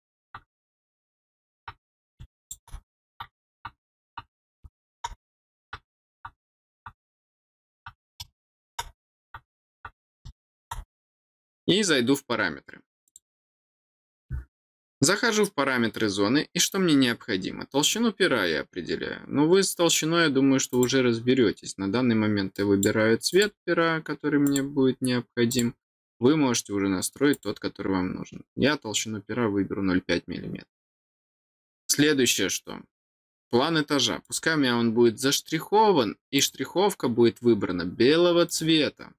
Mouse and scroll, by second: 2.4 click, 4.7 click, 8.5 click, 10.4 click, 13.0 click, 17.8 click, 20.7 click, 22.5 click, 23.3 click, 24.4 click, 25.5 click, 27.3 click, 34.2 click, 36.3 click, 38.4 click.